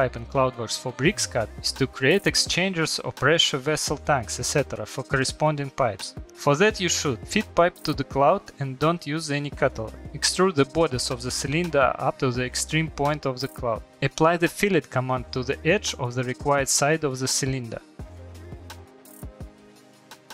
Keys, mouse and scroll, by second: 1.7 middle click, 3.9 Return, 4.7 scroll, 5.5 click, 6.2 Escape, 6.7 middle click, 6.7 scroll, 7.3 middle click, 8.4 click, 9.3 click, 10.1 Return, 13.9 middle click, 14.5 click, 15.3 click, 15.8 Return, 18.2 click, 18.6 scroll, 19.6 middle click, 19.9 middle click.